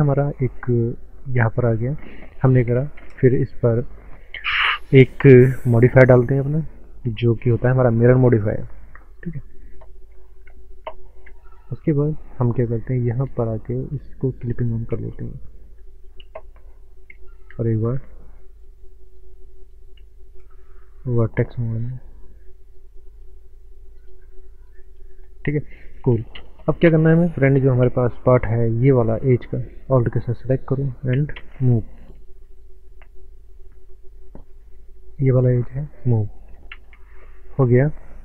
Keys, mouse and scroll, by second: 0.4 scroll down 1, 1.2 Tab, 3.0 ctrl+space, 6.5 click, 10.1 scroll up 1, 10.9 ctrl+space, 11.9 ctrl+space, 13.1 scroll down 1, 14.5 click, 14.9 space, 15.6 middle click, 16.2 Tab, 17.8 click, 20.8 1, 21.7 click, 25.6 scroll down 1, 25.8 middle click, 26.3 ctrl+space, 27.8 ctrl+space, 28.7 scroll up 1, 29.9 alt+click, 31.3 ctrl+space, 32.6 click, 35.1 alt+click, 36.7 ctrl+space, 37.4 middle click, 38.1 shift+middle click.